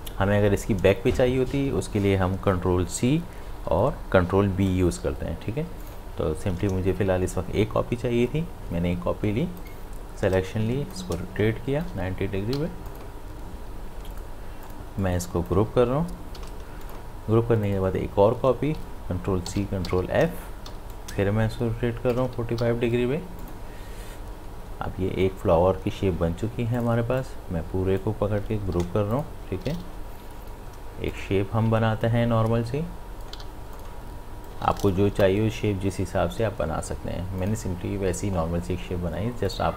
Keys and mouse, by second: 5.8 click, 9.6 click, 10.6 e, 10.9-12.5 drag, 12.5 v, 12.9-16.4 drag, 16.4 ctrl+g, 16.8 click, 19.5 ctrl+c, 19.9 ctrl+f, 20.7 e, 20.9-22.5 drag, 22.5 v, 23.4 click, 26.8 click, 26.8-28.8 drag, 28.8 ctrl+g, 29.2 click, 30.3 m, 30.4 m, 31.1-33.4 drag, 33.4 v, 33.8-39.7 drag.